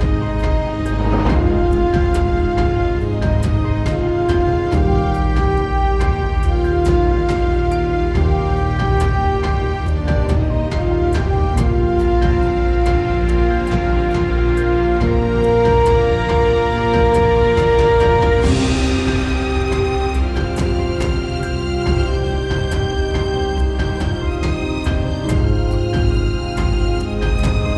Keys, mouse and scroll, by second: 0.0 middle click, 0.8 middle click, 1.5 middle click, 3.2 middle click, 4.6 middle click.